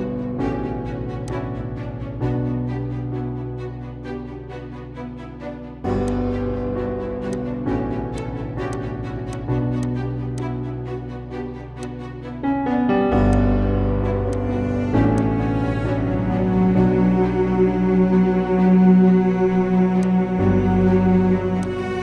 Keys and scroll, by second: 3.5 ctrl+z, 5.1 ctrl+z.